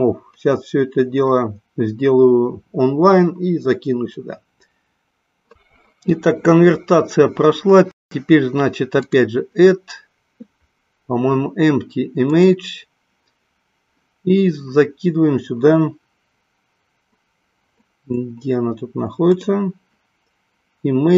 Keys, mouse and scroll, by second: 9.0-12.4 drag, 19.3 click.